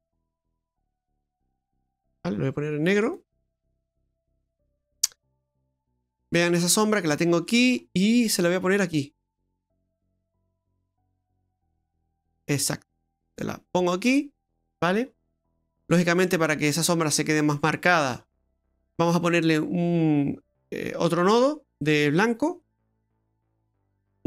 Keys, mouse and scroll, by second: 0.3 middle click, 0.7-1.4 scroll down 8, 1.4 middle click, 2.1 click, 3.0 click, 5.4 scroll up 2, 5.7 middle click, 6.7-7.5 scroll up 6, 7.5 middle click, 8.8 click, 15.1-15.9 scroll up 6, 15.9 middle click, 17.5-18.2 scroll down 2, 18.2-18.5 scroll down 1, 22.6 click, 23.8 click.